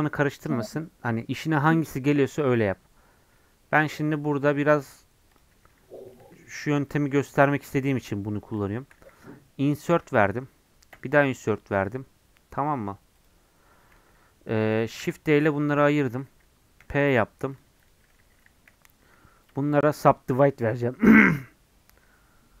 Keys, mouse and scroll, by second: 6.6 Left, 7.3 shift+Left, 7.9 shift+Left, 8.6 shift+Left, 9.9 i, 15.0 shift+d, 17.1 p, 17.5 click, 18.2 Tab, 18.6 a, 20.4-22.6 right drag.